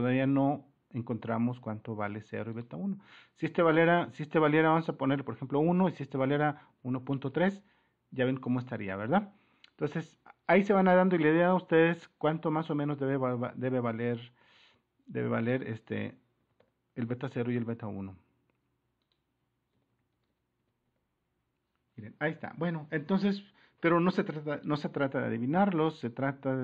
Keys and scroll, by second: 5.4 1, 5.6 Return, 6.4-7.7 typing, 11.1-12.2 typing, 15.9-16.6 typing, 19.7-21.4 typing, 25.1-26.5 typing.